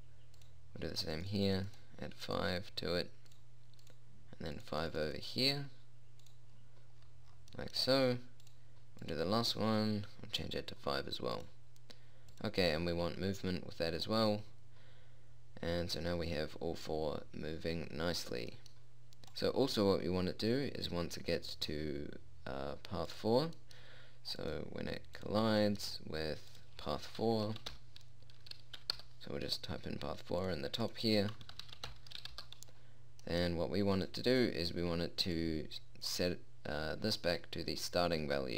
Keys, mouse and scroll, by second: 7.1 click, 18.7-20.2 middle drag, 25.3 click, 34.5-35.5 drag.